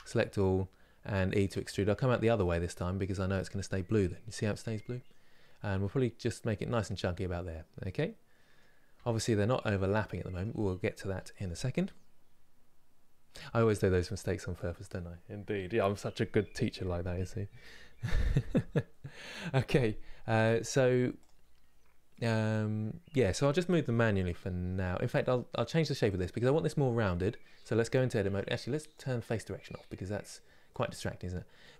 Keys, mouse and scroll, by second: 6.9-8.7 middle drag, 8.7 Tab, 8.9-20.9 middle drag, 20.9 click, 24.9 middle click, 25.8 click, 27.3 Tab, 28.0 Tab, 30.4-31.7 drag.